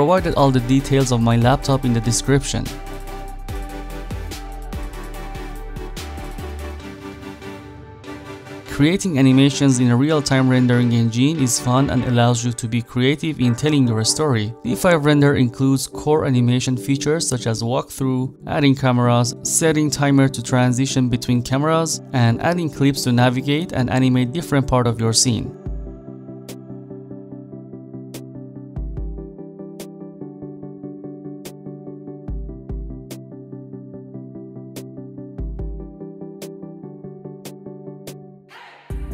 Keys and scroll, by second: 17.3-20.4 typing, 21.8-23.7 typing, 31.4 s, 32.7 e, 34.1 e, 34.8 w, 36.0 e, 37.2 w.